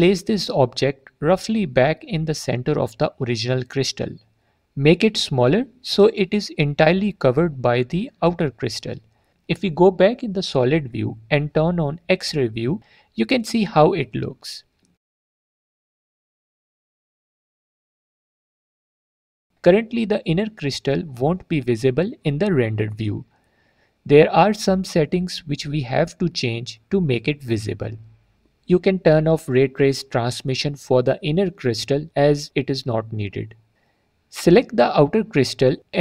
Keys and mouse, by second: 3.1 click, 3.4-5.2 drag, 5.4 drag, 5.6 middle click, 7.6 s, 9.2 click, 11.2 z, 12.2 z, 13.2 click, 14.6 drag, 15.0 click, 15.3 click, 17.4 middle click, 18.0 z, 28.2 click, 35.1 click.